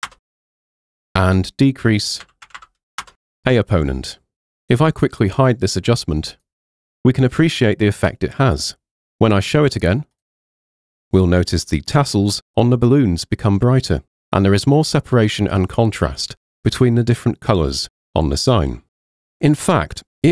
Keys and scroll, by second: 0.1 Return, 2.0-3.1 typing.